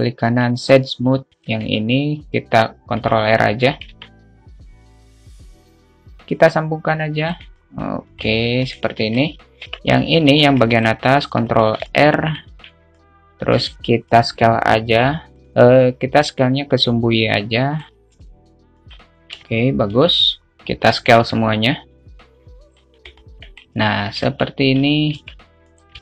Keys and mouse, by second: 0.6 right click, 1.4 Tab, 1.8 ctrl+r, 4.1 Tab, 4.5 alt+shift+middle click, 4.9 `, 6.1-7.7 drag, 7.9-8.5 alt+middle drag, 9.3 alt+middle click, 10.5 Tab, 10.9 ctrl+r, 12.2 alt+middle click, 12.7 alt+z, 13.7 alt+click, 13.8 alt+z, 14.1 middle click, 14.7 s, 15.6 ctrl+z, 16.7-18.2 drag, 18.5 `, 19.4 a, 20.2 a, 20.3 a, 21.5-23.1 drag, 21.9 ctrl+z, 23.5 alt+middle click, 24.5 Tab.